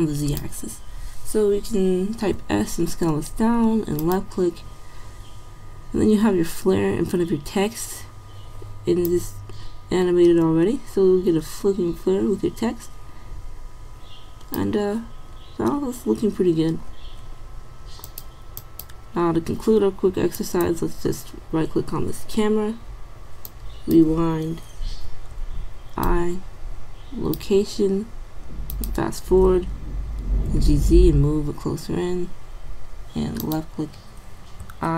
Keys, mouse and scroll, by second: 2.4 s, 17.3-18.1 middle drag, 19.0-19.3 middle drag, 25.1 i, 30.5 g, 34.6 i.